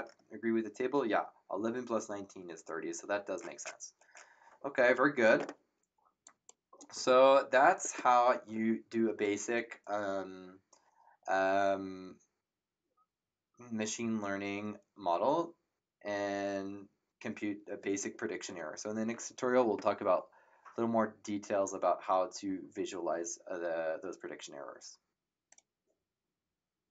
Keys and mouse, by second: 6.2 click, 25.5 click.